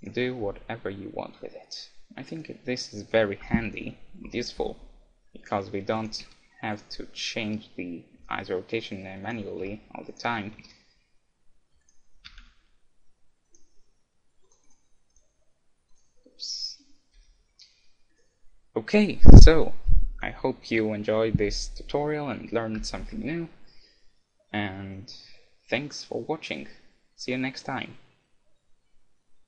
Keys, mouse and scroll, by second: 0.4 g, 2.4-4.1 right drag, 3.4 KP_1, 4.1 KP_6, 4.3 KP_6, 6.0-8.5 right drag, 6.3 z, 7.2 z, 8.3 r, 9.3-11.8 right drag, 9.6 a, 10.7 g, 12.0-14.4 right drag, 12.3 r, 14.4 click, 15.4-17.9 drag, 16.9-18.6 middle drag, 17.3 g, 18.2-20.0 right drag, 23.3-25.1 middle drag.